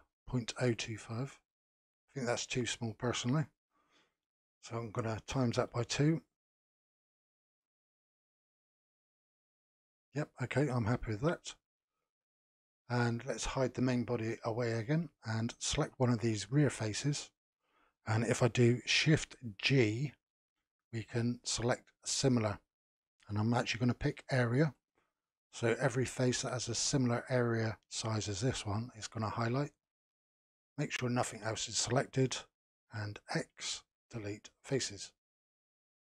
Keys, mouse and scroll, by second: 1.3-3.9 middle drag, 3.9-6.9 drag, 7.6-10.7 middle drag, 11.1-14.1 middle drag, 14.1 click, 14.7-16.5 middle drag, 16.5 click, 20.3 shift+g, 25.3-28.4 middle drag, 29.7-32.7 middle drag, 33.5 x, 35.3-36.0 middle drag.